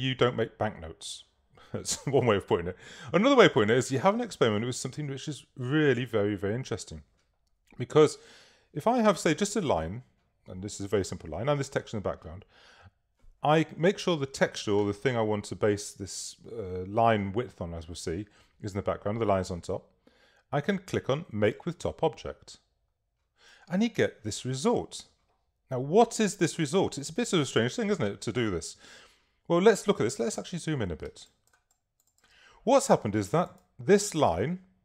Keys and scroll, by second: 31.3 super+space, 31.9 space.